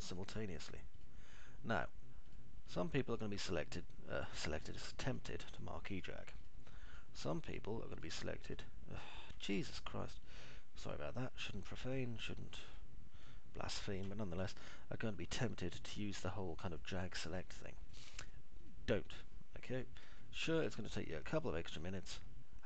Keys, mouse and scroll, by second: 0.7 ctrl+click, 1.3 ctrl+click, 1.8 click, 3.7 click, 4.0 click, 6.0 click, 6.3 click, 7.3 ctrl+click, 13.2 ctrl+click, 15.0-16.3 alt+middle drag, 17.2 ctrl+click, 19.7 ctrl+click, 20.2 ctrl+click, 20.7 ctrl+click, 21.2 alt+middle click, 22.2 middle click.